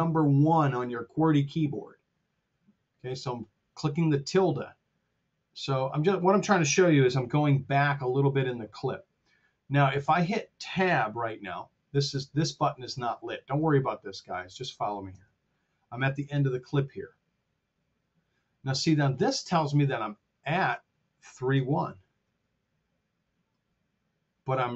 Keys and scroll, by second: 7.4 F7, 15.1 Tab, 16.1 Tab, 21.9 t.